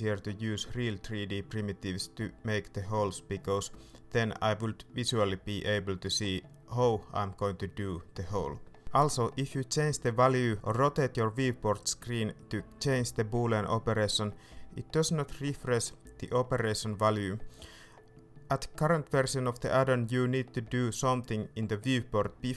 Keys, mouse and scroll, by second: 4.1-9.8 middle drag, 11.5-12.1 scroll up 1, 12.1 middle click, 15.8 Escape, 16.7 middle click, 18.3 ctrl+z, 19.2 middle click, 20.4 Tab, 20.7 middle click, 22.2 Tab, 22.4 middle click.